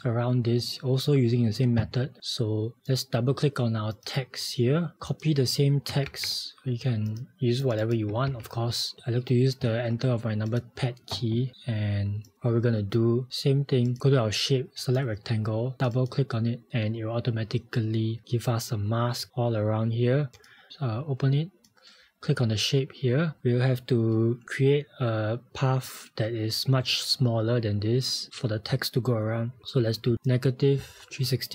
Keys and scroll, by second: 12.4 v.